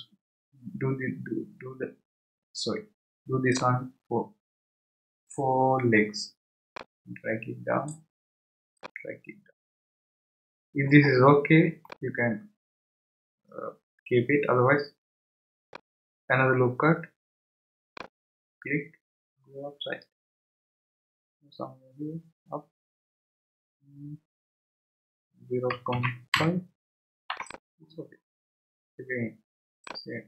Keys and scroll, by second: 25.5-26.8 typing, 27.3 Return.